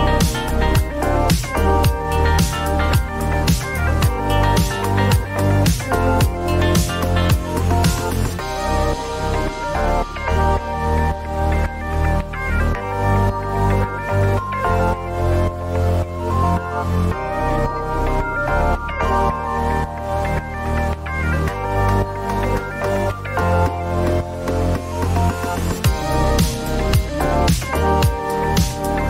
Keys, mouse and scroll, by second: 1.0 click, 1.1-4.1 typing, 3.1 click, 5.1 click, 5.2-5.9 typing, 7.1 click, 7.4 typing, 7.6 Return, 9.2 click, 9.8-10.7 typing, 10.7 Return, 12.2 click, 13.0 click, 13.7 click, 16.4 click, 17.3 click, 20.5 click, 21.6 click, 21.8-22.6 typing, 23.7-24.8 scroll, 24.8 click, 26.4 click, 27.4-29.0 typing.